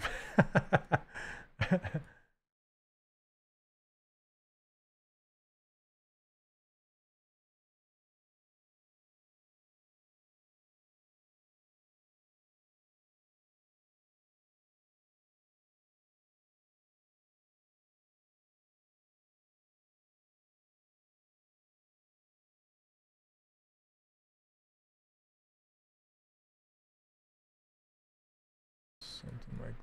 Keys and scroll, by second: 15.7 s, 17.2 s, 22.8 w.